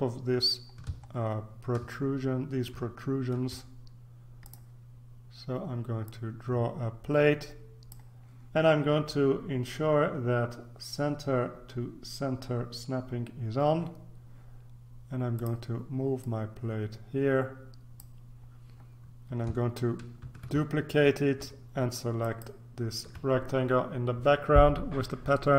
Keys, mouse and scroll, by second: 1.4-2.1 ctrl+scroll up 2, 3.1-3.6 shift+scroll up 2, 4.4 click, 6.0-8.5 drag, 15.3 click, 16.2-18.5 drag, 20.2 ctrl+d, 22.2 shift+click.